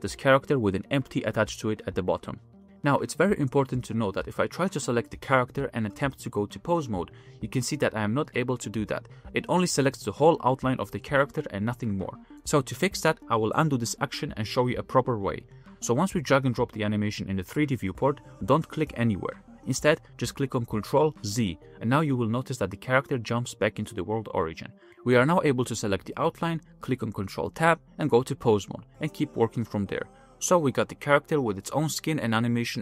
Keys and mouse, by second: 0.8-3.4 middle drag, 4.3 click, 4.8-5.3 middle drag, 5.3 click, 5.6 middle click, 5.8 f, 6.3-7.0 drag, 7.5 ctrl+Tab, 9.0 ctrl+Tab, 9.3 click, 9.7 ctrl+Tab, 10.6-11.5 middle drag, 12.2-12.6 middle drag, 12.7 g, 13.1-13.6 drag, 13.6 g, 14.5 ctrl+z, 14.7 ctrl+z, 14.9 ctrl+z, 15.0 ctrl+z, 15.2 ctrl+z, 15.4 ctrl+z, 15.5 ctrl+z, 15.7 ctrl+z, 15.9 ctrl+z, 16.1 ctrl+z, 17.1 shift+middle click, 21.6 ctrl+z, 23.9-26.1 drag, 23.9-26.1 middle drag, 26.5-27.0 middle drag, 27.0 click, 27.4-28.0 middle drag, 28.2 ctrl+Tab, 28.5 shift+middle click, 29.6 r, 31.5-31.9 shift+middle drag, 32.3-32.7 middle drag, 32.7 g.